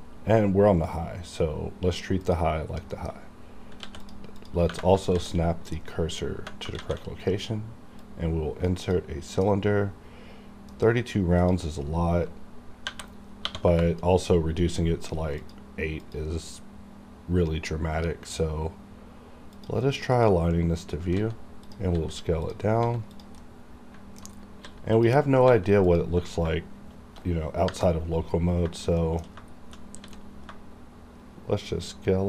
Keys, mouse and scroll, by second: 2.2 click, 2.9 F9, 3.8 x, 4.0 click, 5.2 shift+s, 5.6 click, 5.7 click, 6.8 shift+a, 8.0 click, 8.8 click, 9.3 F9, 11.4 click, 12.8 1, 13.6 KP_Enter, 15.4 click, 19.6 click, 21.2 s, 21.7 click, 21.9 s, 22.5 click, 22.8 s, 23.1 click, 23.4 middle click, 24.3-24.6 alt+scroll down 1, 24.7 s, 25.0 click, 25.5 s, 25.9 click, 27.7 KP_Divide, 29.0 shift+middle click, 30.0 s.